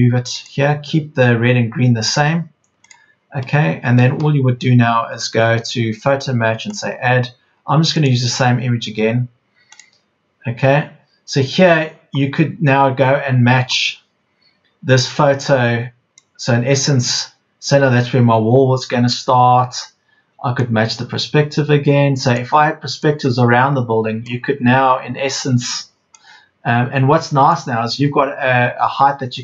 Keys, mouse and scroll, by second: 4.5 Escape, 26.0 Escape, 27.5 Escape.